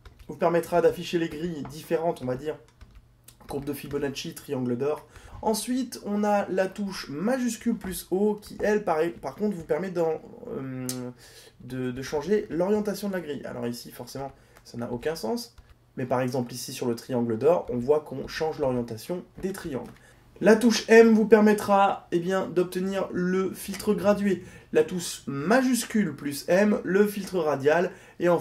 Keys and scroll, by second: 7.4 shift+o, 21.0 m, 26.0 shift+m.